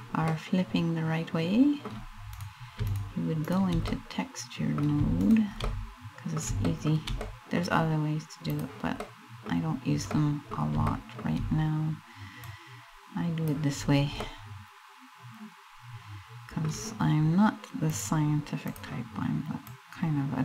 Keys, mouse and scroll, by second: 0.0 middle click, 0.7 middle click, 2.0 right click, 2.5 shift+right click, 3.1 right click, 3.6 middle click, 4.8 shift+right click, 5.3 middle click, 6.3 shift+middle click, 6.8 middle click, 7.3 scroll down 1, 8.1 click, 8.6 middle click, 9.2 scroll up 2, 9.6 middle click, 10.5 shift+middle click, 12.0 click, 13.4-13.8 scroll down 4, 13.8 middle click, 17.5 click, 19.3 click.